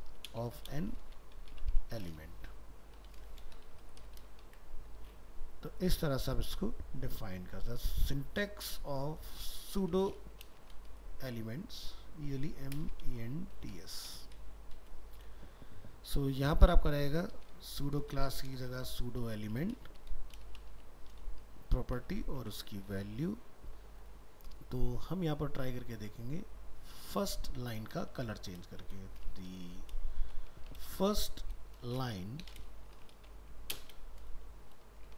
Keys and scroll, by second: 4.5 ctrl+s, 22.4 ctrl+s.